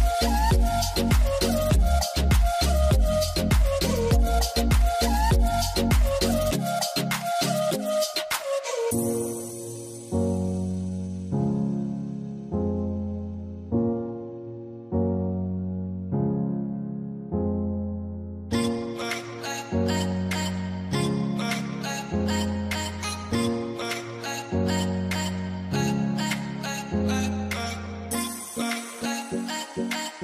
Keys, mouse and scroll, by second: 6.1 double click, 11.8 double click, 21.0 middle click, 22.3 ctrl+z, 29.2 scroll down 1, 29.5 middle click.